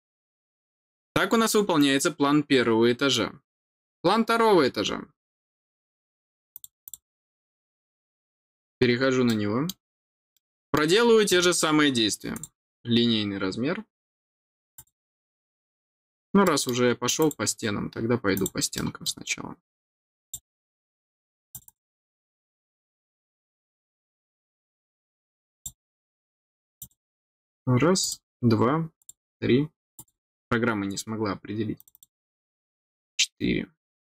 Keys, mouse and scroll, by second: 6.5 click, 6.8 click, 8.6-9.1 scroll down 2, 9.2 middle click, 10.3 middle click, 12.3 click, 13.3 scroll down 1, 14.7 click, 16.0 scroll down 1, 16.4 middle click, 17.2 click, 18.3 click, 18.7 middle click, 20.2 click, 21.5 click, 25.5 click, 26.7 click, 28.0 click, 28.9 click, 29.9 click, 31.7 click.